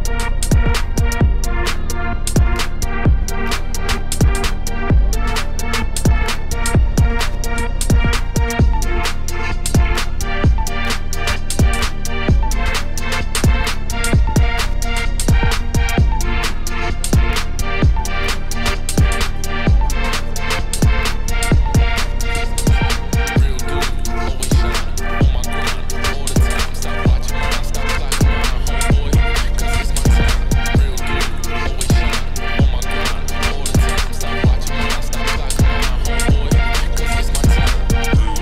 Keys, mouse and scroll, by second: 1.1 scroll down 1, 1.3 click, 1.9 middle click, 2.5 scroll up 1, 2.8 click, 3.0 scroll down 1, 3.5 shift+middle click, 4.0 scroll up 1, 4.5 click, 5.1 click, 5.5 KP_0, 6.1-7.1 scroll down 1, 7.1-8.2 drag, 9.2 click, 10.4-10.7 scroll up 1, 10.7 shift+middle click, 11.4 click, 11.6-13.4 middle drag, 13.4-16.5 drag, 16.5 KP_0, 17.3-19.0 drag, 19.1-20.0 scroll up 1, 20.0-20.3 scroll up 1, 21.0 right click, 22.0 click, 23.1 click, 24.0 middle click, 24.4 scroll down 1, 24.6 middle click, 25.2-25.9 scroll up 1, 25.9-27.4 drag, 27.4-27.9 scroll down 1, 27.9 shift+middle click, 28.7 shift+click, 29.2 ctrl+l, 30.0 click, 30.8-32.0 drag, 32.4-33.7 middle drag, 33.7 scroll up 1, 33.9-35.4 shift+middle drag, 35.7-37.0 shift+drag, 37.0 shift+middle click, 37.2-38.4 scroll up 2.